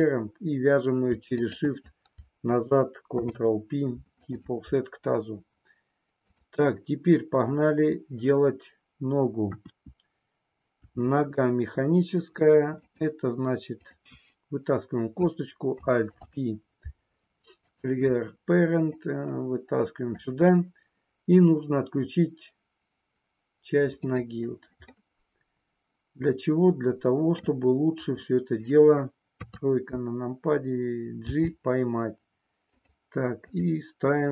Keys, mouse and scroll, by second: 1.2 shift+click, 3.1 ctrl+p, 9.4 KP_1, 10.8 e, 12.7 click, 13.7 click, 16.1 alt+p, 19.0-20.1 drag, 24.2 click, 25.2-27.5 middle drag, 29.5 KP_3, 31.4 g, 32.8 click, 33.4 click.